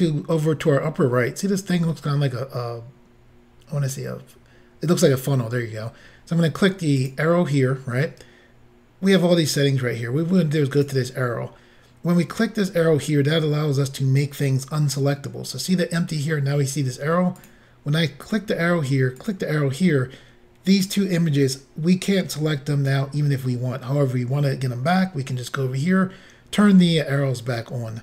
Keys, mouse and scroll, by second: 7.0 click, 10.8 click, 17.4 click, 19.2 click.